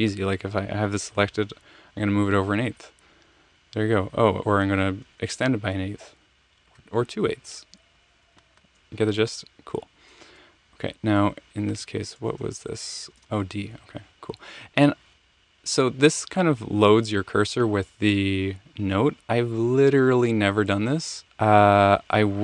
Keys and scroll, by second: 1.6 alt+Right, 3.0 alt+Right, 5.5 alt+shift+Right, 6.6 alt+shift+Right, 8.2 alt+shift+Left, 8.4 alt+shift+Left, 8.5 alt+shift+Left, 10.3 BackSpace, 12.2 Return, 13.1 space.